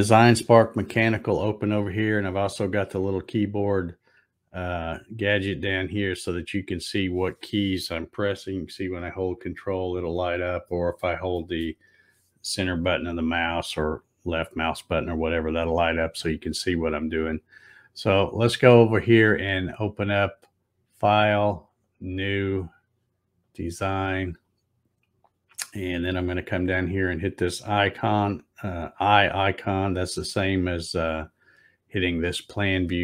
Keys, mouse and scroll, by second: 10.7-11.1 scroll up 1, 11.4 scroll up 1, 14.1 click, 20.0 click, 21.9 click, 23.6 click, 30.8 click.